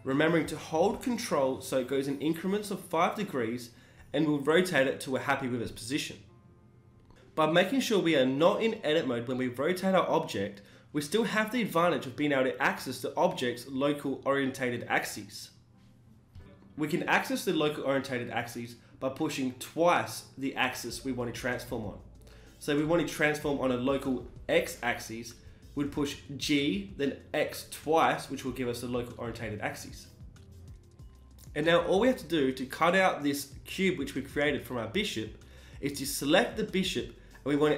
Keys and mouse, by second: 1.3 g, 3.1 g, 8.8 g, 10.8 g, 13.1 s, 16.4 s, 19.3-21.2 middle drag, 19.7 s, 21.2 s, 22.6 s, 27.9-31.1 middle drag, 29.4 s, 31.1 z, 31.2-32.3 middle drag, 32.3 Tab, 32.6 z, 33.1 Tab, 33.6 z.